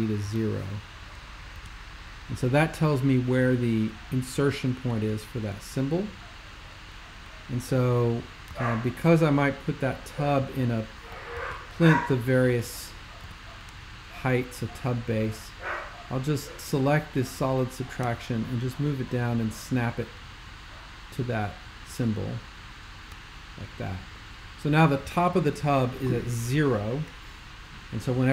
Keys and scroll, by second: 0.2 0, 1.5 Tab, 8.6 c, 11.4 super+2, 13.2 x.